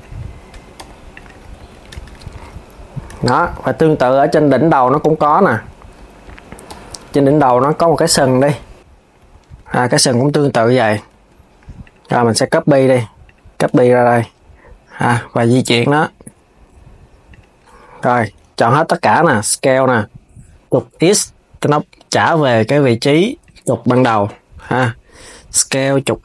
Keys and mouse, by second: 0.3 Tab, 0.5 KP_3, 0.9 click, 1.2 s, 3.5 click, 6.4 KP_3, 8.9 KP_3, 9.4 s, 10.9 shift+a, 11.6 click, 13.0 click, 13.4 shift+d, 15.6 g, 17.8 Tab, 23.7 KP_7, 25.4 s.